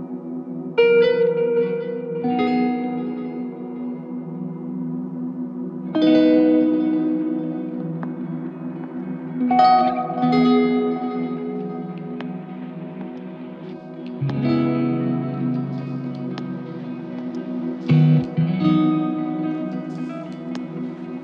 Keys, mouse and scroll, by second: 5.0 typing, 7.0 ctrl+click, 16.0 alt+click, 18.7 alt+click, 20.8 shift+click.